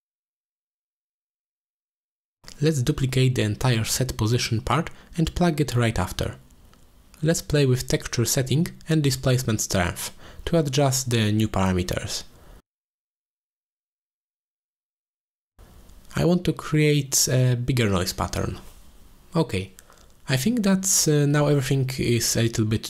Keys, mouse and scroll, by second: 0.6 click, 1.0 g, 2.3 g, 3.7 click, 4.3 shift+d, 6.0 click, 6.3 g, 7.6 drag, 8.3-10.8 drag, 13.0 click, 14.7 click, 15.0 1, 15.8-16.7 drag, 17.3-19.1 drag, 19.5 middle click, 19.8 middle click, 20.8 click, 21.9 click, 22.2 click.